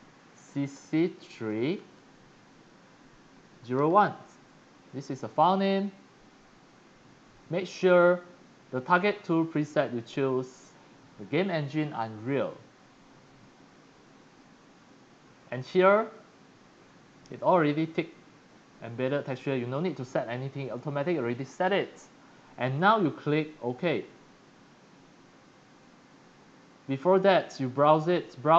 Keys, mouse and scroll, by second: 0.7-2.2 typing, 3.5 0, 3.7 1, 4.4 click, 8.9 click, 12.4 click, 16.6 click, 17.3 click, 18.8 middle click, 19.1 middle click, 19.3 middle click, 26.7 click, 27.1 click, 27.9 click.